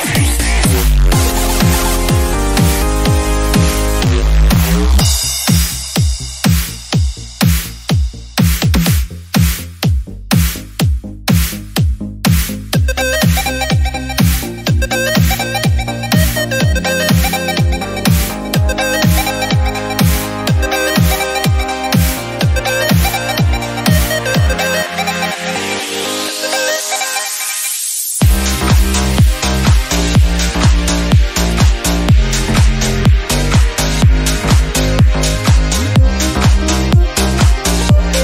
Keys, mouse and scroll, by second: 0.3 shift+middle click, 0.9-2.1 drag, 2.1-3.2 shift+middle drag, 2.3-2.6 scroll up 1, 3.2-4.8 drag, 5.3 right click, 6.1 click, 7.1-9.8 drag, 9.8 scroll down 1, 9.9 middle click, 10.7 scroll up 1, 11.0 click, 11.7 shift+middle click, 11.9-14.4 drag, 15.1-15.7 scroll down 3, 15.3 click, 15.7 shift+middle click, 16.2 scroll up 1, 16.3 middle click, 16.5 click, 16.9 Tab, 17.1 shift+middle click, 17.2 scroll up 2, 17.4 middle click, 17.7 1, 17.8 click, 18.7 Tab, 18.8 scroll down 1, 19.0 middle click, 19.2 Tab, 19.5 click, 19.8 middle click, 20.3-21.5 drag, 21.5 shift+middle click, 22.3 click, 22.9 middle click, 23.3-25.1 drag, 25.1 Tab, 25.2 middle click, 26.1 click, 26.3 Tab, 26.4 middle click, 27.1 click, 27.5 middle click, 27.9-29.2 drag, 29.2 scroll down 1, 29.8-31.2 shift+drag, 31.4 Tab, 31.5 middle click, 31.9 scroll up 1, 32.1 Tab, 32.5 click, 33.2 middle click, 33.5 click, 33.9 middle click, 34.6 shift+click, 35.1 middle click, 35.6 click, 36.1-37.6 middle drag, 37.6 Tab, 37.7 middle click.